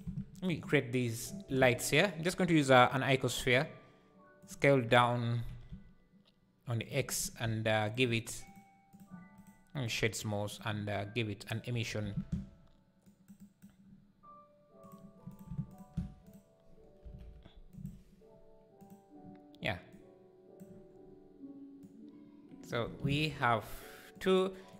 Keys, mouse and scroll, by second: 0.0 x, 0.3 shift+Right, 0.3 right click, 2.9 shift+a, 3.4 s, 4.7 Tab, 5.5 s, 7.0 Tab, 7.4 s, 8.7-10.6 drag, 10.6-11.5 right drag, 11.5 click, 11.8 x, 12.1 shift+a, 15.7 ctrl+shift+click, 17.7 KP_0, 19.9 click, 23.0 shift+d.